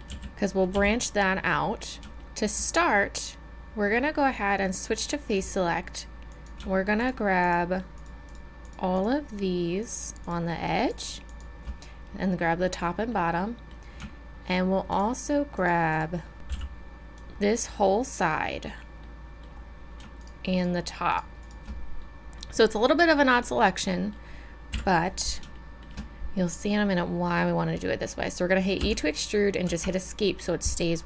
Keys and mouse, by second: 0.1 z, 0.8 z, 2.2 KP_1, 4.7-6.3 drag, 9.4-13.1 drag, 13.1 middle click, 14.9-16.3 drag, 16.3-19.1 middle drag, 16.6 b, 20.2-23.4 right drag, 24.8 KP_1, 28.9 e.